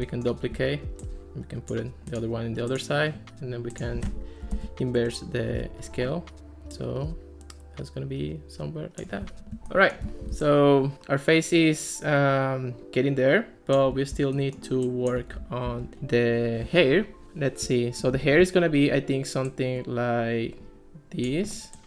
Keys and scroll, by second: 4.2-5.2 typing, 15.7 alt+r, 18.4 ctrl+s.